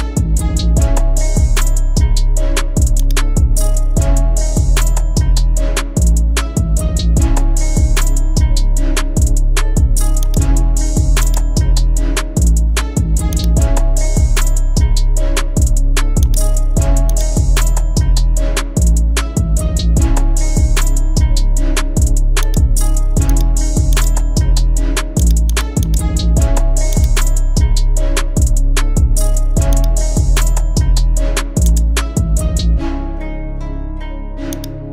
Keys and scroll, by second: 18.3 Down, 18.9 Down, 19.4 Up.